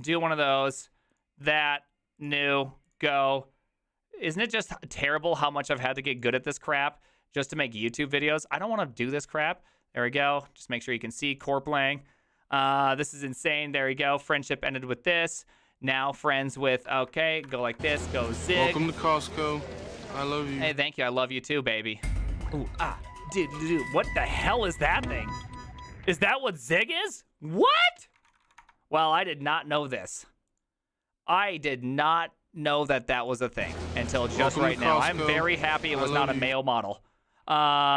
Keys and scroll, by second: 16.9 alt++, 17.5-18.5 typing, 19.1 Return, 28.1-28.9 typing, 37.7-37.9 typing.